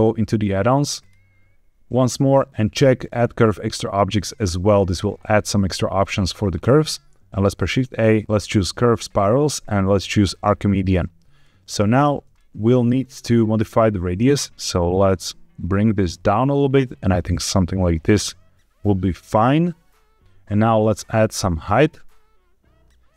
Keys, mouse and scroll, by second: 7.1 shift+a, 11.3 middle click, 11.9 scroll up 2, 12.3 shift+middle click, 14.3-20.2 shift+drag, 20.8-22.8 shift+drag.